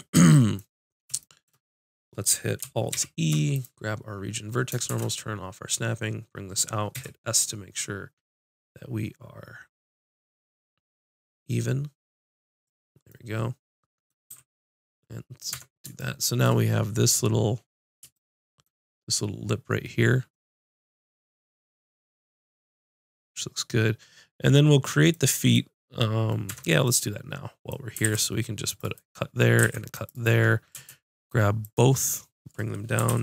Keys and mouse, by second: 2.9 alt+e, 12.6 click, 14.3 a, 15.5 Tab, 21.9 middle click, 26.5 Tab, 28.0 ctrl+r, 29.6 ctrl+r, 30.2-33.2 drag, 33.0 g.